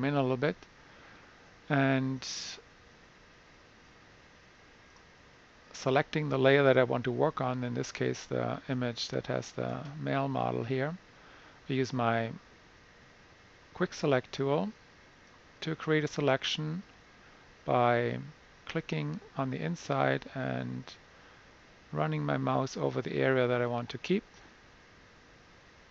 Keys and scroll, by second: 0.1 super+=, 0.3 super+=, 0.6 super+=.